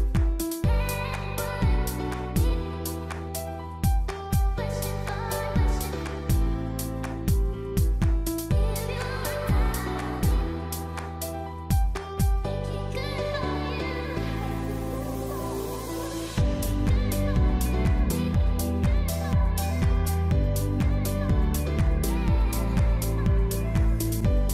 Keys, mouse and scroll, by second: 0.1 s, 1.0 middle click, 2.6-3.8 scroll down 4, 3.0 middle click, 4.4 middle click, 5.6 click, 5.9 click, 6.2 s, 6.9 middle click, 7.1-8.6 scroll up 3, 7.3 middle click, 8.7 middle click, 10.0 c, 11.1 middle click, 11.6 click, 12.9 middle click, 14.1-14.7 scroll up 3, 14.3 middle click, 15.0 click, 15.2 middle click, 15.8 click, 16.3 click, 16.6 shift+click, 16.8 shift+click, 17.0 middle click, 17.6 shift+click, 17.8 shift+click, 18.4 shift+click, 18.5 middle click, 19.5 click, 21.8 middle click, 24.1 click, 24.3 middle click.